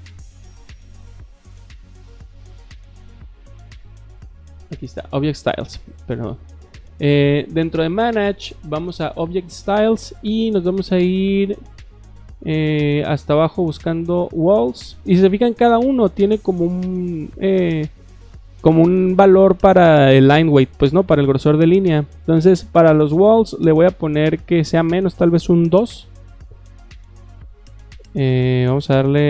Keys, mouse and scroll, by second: 4.5 click, 10.6-12.3 middle drag, 12.4 middle click, 13.2-13.9 scroll down 3, 23.7 click, 24.2 drag, 27.1 click.